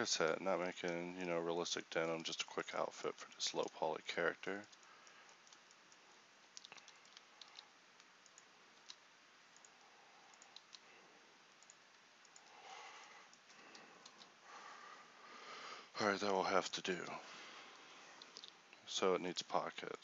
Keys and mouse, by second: 0.1 middle click, 2.9-7.5 middle drag, 7.5 alt+s, 8.8 ctrl+r, 10.6 click, 10.7 ctrl+r, 12.4 Tab, 14.1 KP_1, 15.3 Tab.